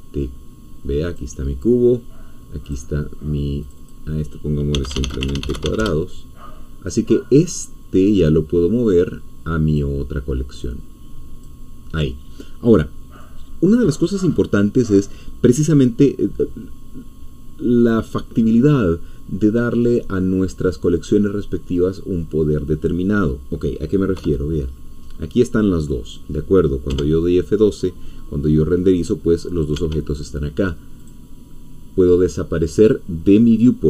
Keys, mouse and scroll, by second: 1.0 click, 2.7 click, 3.6 click, 4.5-6.1 typing, 8.1-9.9 drag, 10.7 click, 23.5 scroll down 1, 24.2 KP_0, 25.2 scroll up 1, 26.9 F12, 29.7 Escape, 31.0 click.